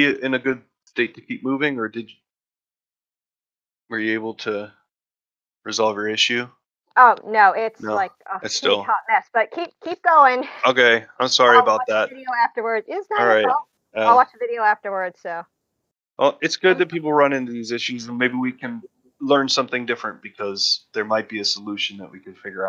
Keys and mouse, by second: 16.3 middle drag, 16.7 shift+middle drag.